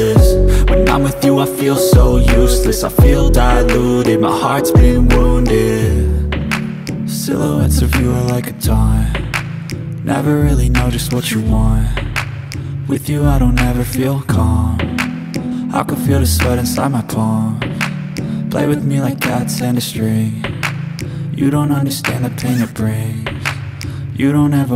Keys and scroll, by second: 0.4 2, 0.7 Return, 6.1 Escape, 6.2 space, 6.3 Escape, 9.1-10.0 typing, 10.7 Return, 19.8 Return.